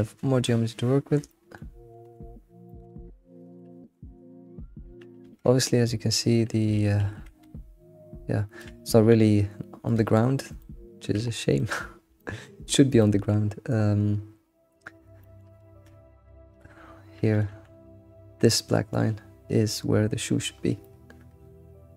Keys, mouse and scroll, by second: 0.4 shift+middle click, 1.1 scroll down 1, 1.3-3.8 shift+middle drag, 3.8-4.3 scroll down 4, 5.3 Tab, 6.7 alt+x, 7.4 Tab, 7.5-8.4 scroll down 4, 8.9 g, 10.2-10.6 scroll up 4, 10.6-11.8 shift+middle drag, 11.8-12.4 scroll up 3, 12.4-14.7 shift+middle drag, 14.7-15.2 scroll down 1, 15.2 shift+middle click, 15.6 scroll up 3, 15.7 Tab, 16.2-17.0 scroll down 5, 16.6 Tab, 17.4 click, 17.5 g, 20.5-20.8 scroll down 2, 20.8-21.9 shift+middle drag.